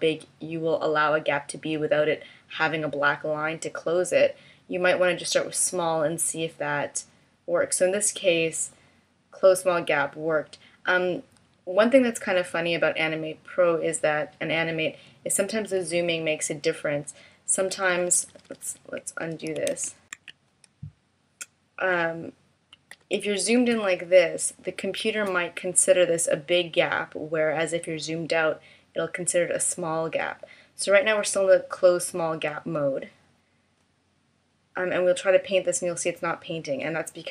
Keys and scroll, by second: 15.9 super+-, 17.6 super+=, 19.5 super+z, 22.4 super+=, 23.1 space.